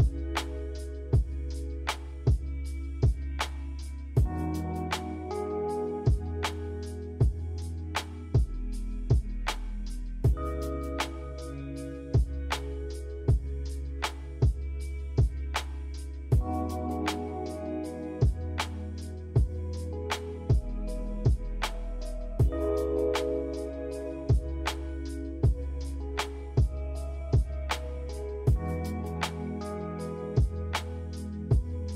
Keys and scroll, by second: 0.0 a, 3.3 Delete, 4.0 i, 4.7 Delete, 5.9 a.